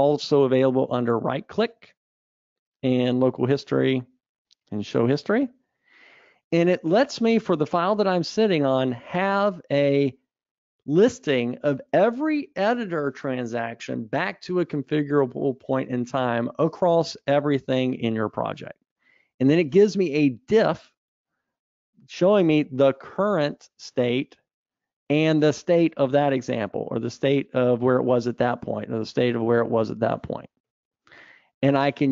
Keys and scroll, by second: 0.1 ctrl+shift+super+a.